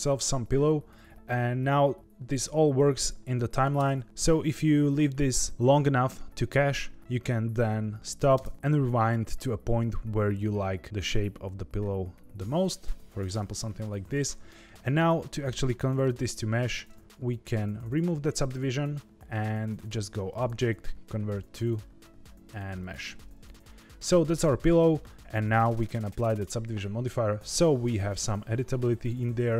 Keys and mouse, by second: 2.0-3.6 drag, 3.7 space, 4.0 space, 8.3 space, 8.5-13.2 drag, 13.7-14.4 middle drag, 14.6-15.0 shift+middle drag, 15.7 middle click, 17.4 right click, 18.4 click, 20.3-22.9 drag, 26.1 ctrl+2, 28.0 Tab, 28.7 Tab.